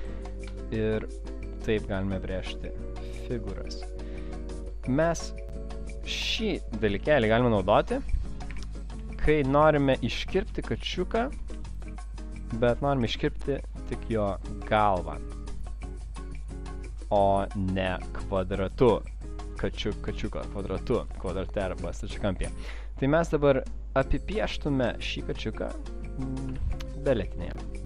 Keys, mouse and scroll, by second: 1.0 click, 4.7 double click, 6.9 v, 7.4 click, 7.5 click, 8.5 Delete, 8.9 space, 9.4 click, 9.6 click, 10.0 click, 10.7 click, 10.7 alt+scroll up 1, 11.2 alt+scroll up 1, 11.5 space, 12.1 click, 12.7 click, 13.2 p, 15.2 click, 15.6 double click, 19.5 click, 26.6 ctrl+z.